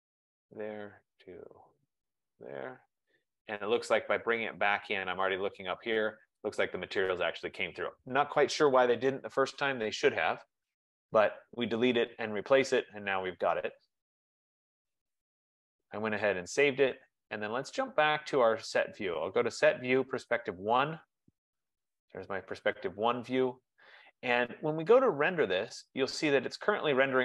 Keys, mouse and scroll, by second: 0.5 click, 2.5 click, 3.6-4.4 typing, 5.3 click, 10.3 click, 11.5 click, 18.1 click, 20.8 click, 25.5 click.